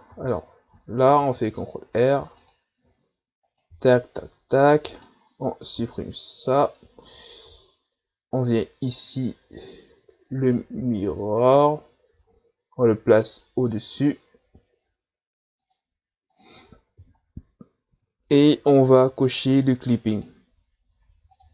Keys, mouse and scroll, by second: 0.1 ctrl+z, 1.2 ctrl+r, 3.5 right click, 3.7 b, 5.8 x, 7.5 Tab, 8.5-17.3 drag, 17.3-17.9 scroll up 1, 17.9 Tab, 18.3 Tab, 19.3-21.5 drag.